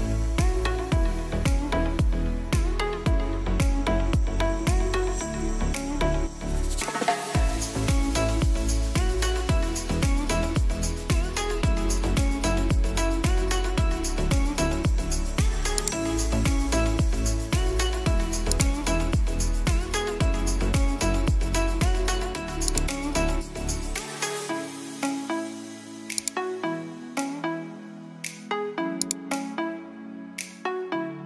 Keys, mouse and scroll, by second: 0.0-0.6 typing, 0.6-7.0 drag, 7.0-10.1 drag, 10.1 ctrl+alt+scroll down 1, 10.6 ctrl+alt+scroll up 1, 10.8-12.1 drag, 12.1 ctrl+alt+scroll down 1, 15.6 click, 18.6-22.3 drag, 25.8 right click, 25.8 typing, 28.8 click.